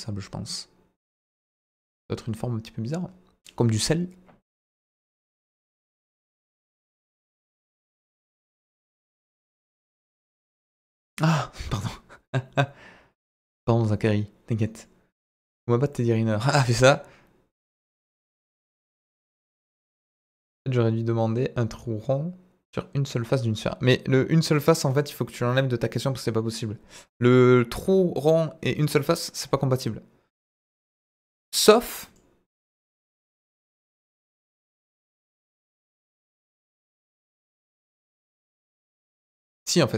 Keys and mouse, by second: 32.0 drag, 33.2 Delete, 34.0 KP_7, 35.7 shift+a.